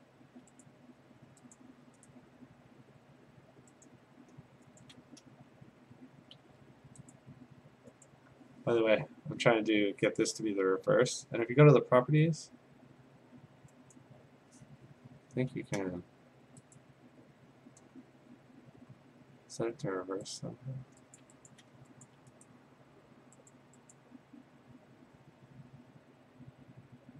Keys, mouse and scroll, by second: 0.6 click, 1.6 click, 2.1 right click, 3.9 click, 4.8 ctrl+click, 5.8 a, 6.4 ctrl+d, 7.1 click, 8.1 click, 10.2 click, 12.0 click, 14.0 click, 15.7 ctrl+z, 16.8 click, 18.0-19.4 scroll, 19.4-19.8 scroll, 20.4 click, 21.2 click, 21.5 shift+click, 21.6 shift+click, 22.0 ctrl+click, 22.5 right click, 23.5 click, 24.0 click, 24.3 shift+click.